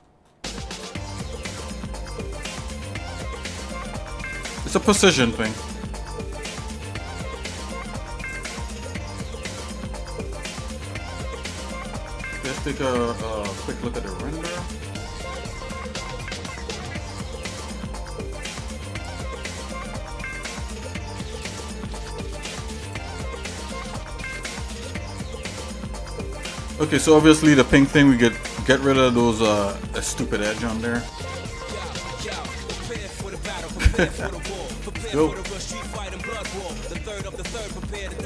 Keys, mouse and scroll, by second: 0.2 scroll down 1, 1.4 g, 5.1-6.0 scroll down 7, 6.1 shift+middle click, 6.5 z, 7.4 z, 8.8 shift+middle click, 9.3-9.9 scroll down 3, 9.9 middle click, 10.3 shift+middle click, 10.7 Tab, 11.2 middle click, 11.7 shift+middle click, 15.1 middle click, 15.6 KP_Divide, 16.6 middle click, 17.1-17.4 scroll down 2, 19.0 click, 19.4 middle click, 20.1 middle click, 21.4 click, 22.0-22.5 scroll up 2, 23.0 click.